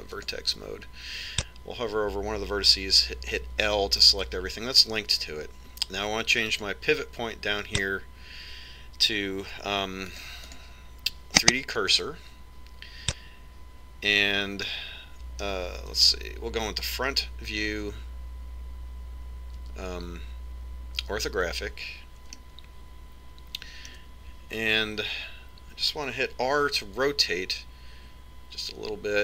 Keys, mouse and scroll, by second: 0.1 ctrl+Tab, 4.7 l, 7.8-9.5 drag, 11.7 click, 15.9-17.3 middle drag, 17.3 KP_1, 20.9 KP_5, 23.7 middle click, 24.3-25.4 middle drag, 28.3 r.